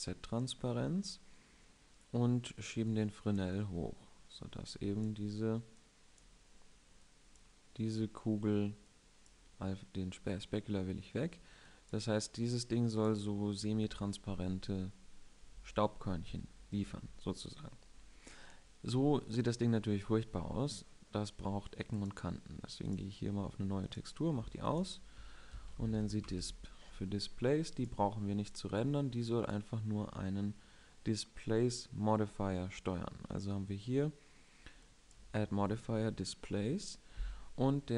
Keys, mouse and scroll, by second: 9.3-13.9 drag, 23.1-31.4 drag.